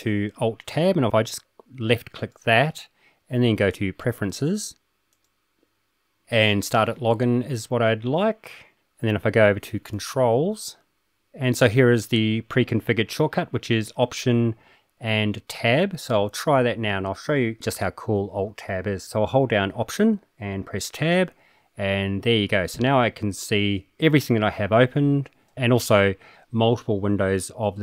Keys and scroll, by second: 20.9 alt+Tab, 22.6 alt+Tab, 23.1 alt+Tab.